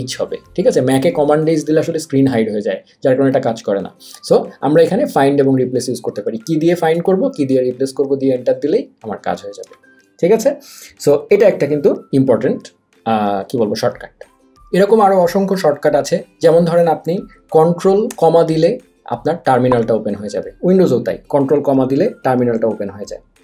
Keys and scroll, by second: 9.7 Escape, 18.3 ctrl+`.